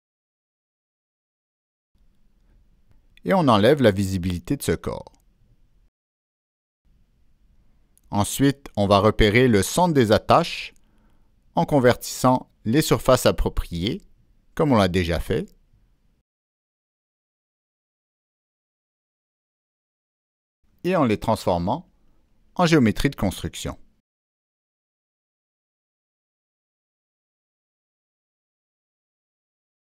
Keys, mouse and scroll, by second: 1.4 click, 2.0 click, 2.8 click, 3.2 right click, 5.3 click, 5.3 right click, 7.8 click, 9.3 ctrl+click, 10.0 ctrl+click, 11.4 ctrl+click, 13.6 ctrl+click, 15.9 click, 18.8 ctrl+a, 20.4 click, 21.9 ctrl+z, 21.9 Escape, 25.3 click, 25.6 middle click, 26.2 click, 27.4 click, 28.6 click.